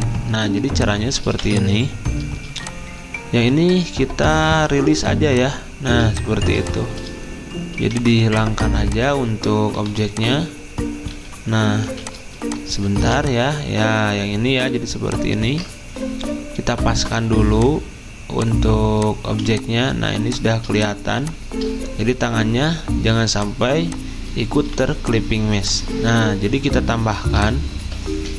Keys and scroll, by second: 0.6 v, 5.8 z, 7.8 v, 9.8 Delete, 11.1 d, 16.4 typing, 19.2 z, 23.7 v, 27.8 ctrl+z.